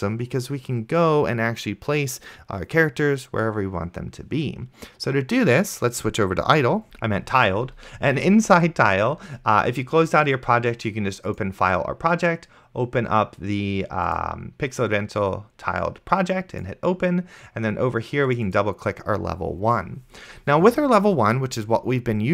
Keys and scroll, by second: 7.1 ctrl+super+Right.